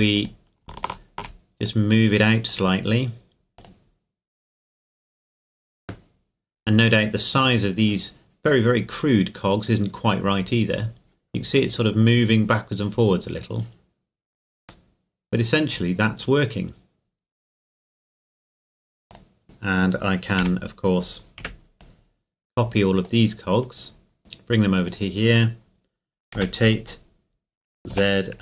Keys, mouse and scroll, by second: 0.1 right click, 0.8 shift+right click, 1.7-5.8 drag, 11.7 scroll up 1, 13.1 scroll down 1, 14.9 middle click, 16.3 scroll up 1, 18.1 scroll down 1, 18.8-20.4 scroll down 3, 19.1 click, 20.4 a, 21.4 b, 21.8-24.2 drag, 24.9-26.4 drag, 26.4 r, 27.9 z.